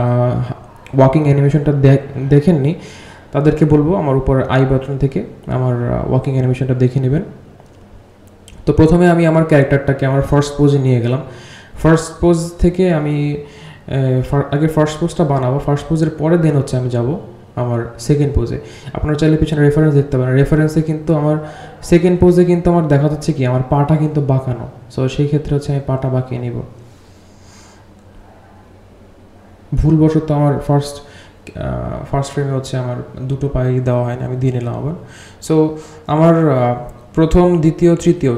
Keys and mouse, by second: 2.0 click, 2.5 g, 6.8-7.7 drag, 9.5 g, 11.2 click, 11.9 click, 13.6 g, 15.2 r, 22.6-24.8 drag, 26.4 click, 26.6 click, 27.7-29.3 shift+drag.